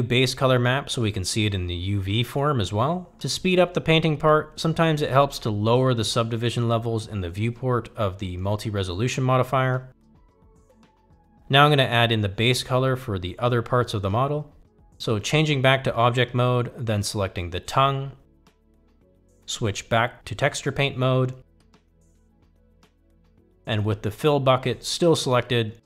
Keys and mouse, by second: 1.1-2.6 drag, 5.4 click, 8.0 click, 9.3 click, 18.4 click, 20.1 click, 22.8-23.7 drag.